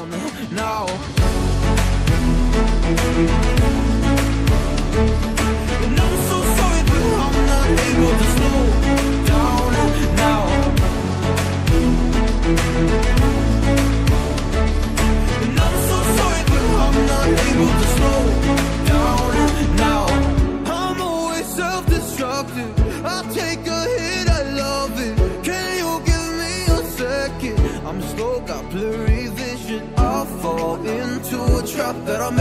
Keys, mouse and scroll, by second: 0.3 scroll down 1, 1.3 click, 3.9 ctrl+z, 5.7 click, 11.7 scroll up 1, 13.5 scroll down 1, 14.0 scroll up 1, 15.2 scroll down 1, 15.8 scroll up 1, 20.3 click, 20.5 double click, 21.3-25.1 typing, 27.2 click, 30.1 scroll up 1, 31.0 click.